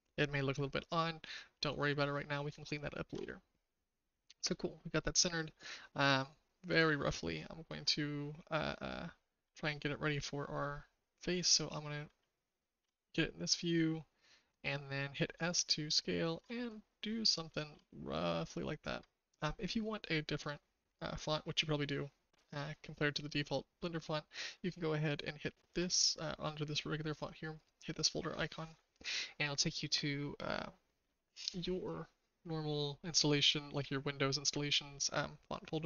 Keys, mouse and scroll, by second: 2.5 shift+middle click, 6.6 click, 12.7 s, 17.6 s.